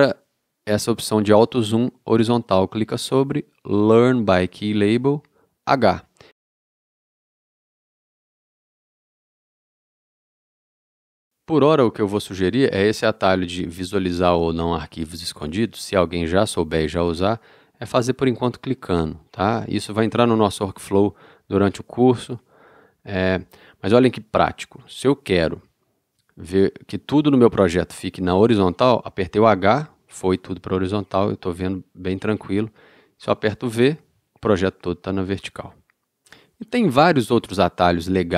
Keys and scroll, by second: 29.6 h, 33.8 v.